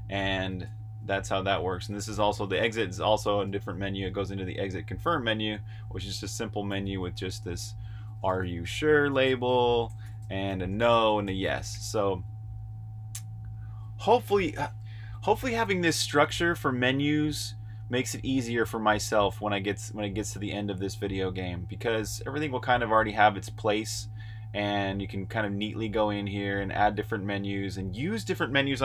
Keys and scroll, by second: 0.0-3.3 typing, 6.3-7.9 typing, 14.9-16.0 typing, 24.5-25.6 typing.